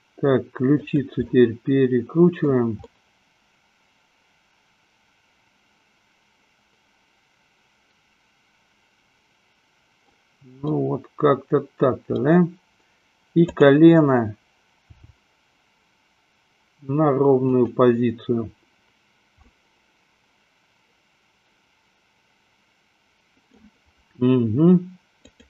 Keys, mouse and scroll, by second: 1.6-2.7 middle drag, 3.1-10.2 middle drag, 10.9-12.2 middle drag, 15.2 g, 19.7-23.9 middle drag, 25.2 click.